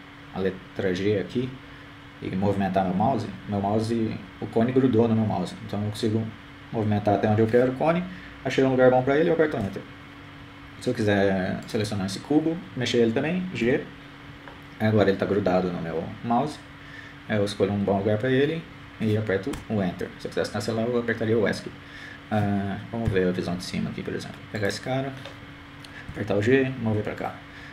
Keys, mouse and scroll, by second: 3.0 g, 15.3 right click, 17.2 g, 26.7 KP_7.